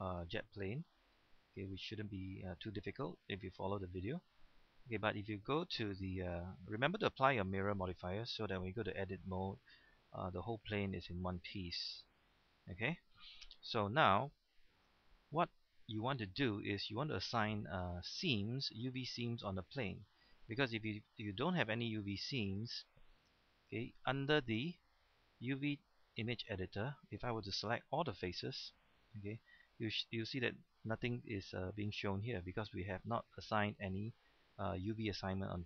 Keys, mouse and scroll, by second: 0.9-1.2 scroll down 1, 1.2-8.5 middle drag, 9.1 Tab, 9.7-13.6 middle drag, 13.6 a, 14.2 scroll down 1, 15.1-15.6 scroll up 1, 15.6 middle click, 16.5-20.7 shift+middle drag, 22.5 right click, 23.2 click, 27.7 a, 28.5-35.6 middle drag.